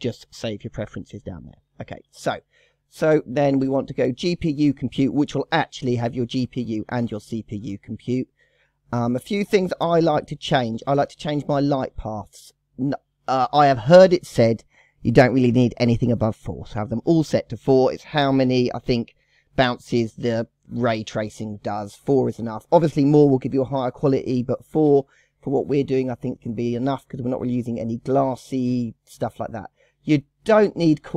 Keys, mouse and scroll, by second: 3.3-6.3 drag, 7.2-7.8 scroll down 1, 7.8-8.6 scroll up 3, 8.6-9.2 scroll up 1, 9.2 scroll up 1, 9.3-9.8 scroll down 2, 9.8 scroll up 1, 9.8-11.3 scroll down 1, 11.3-11.7 drag, 11.7-12.2 scroll down 2, 23.5-23.8 scroll down 2, 25.9 scroll down 3, 26.5-27.4 scroll up 2, 27.4-28.0 scroll down 2, 28.0-29.0 scroll up 3, 29.0-29.7 scroll down 2.